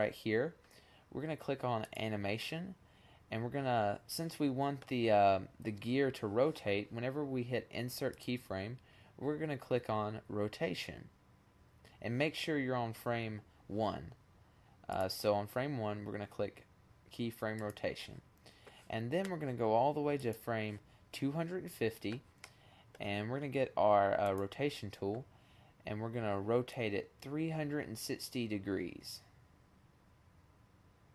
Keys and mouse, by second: 1.2-2.9 middle drag, 7.5 click, 8.3-9.1 middle drag, 9.1 click, 14.2-15.7 drag, 19.0-21.2 drag, 21.3-23.6 middle drag, 23.6-24.4 drag, 24.4 middle click, 25.1 click, 26.0 click, 26.5-27.0 middle drag, 27.0-27.9 drag.